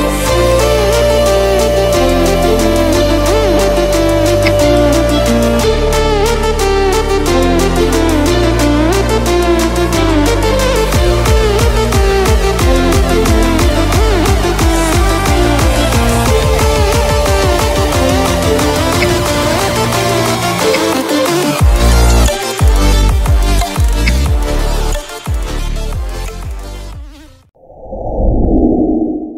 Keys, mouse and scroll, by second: 2.1 alt+scroll up 1, 2.9 alt+scroll up 1, 4.4 g, 5.7-9.1 drag, 10.5 scroll down 1, 11.8-14.4 drag, 16.2-19.0 drag, 18.9 v, 19.8 click, 20.7 ctrl+0, 21.4-22.6 drag, 24.0 ctrl+g, 24.8 click, 25.0 click.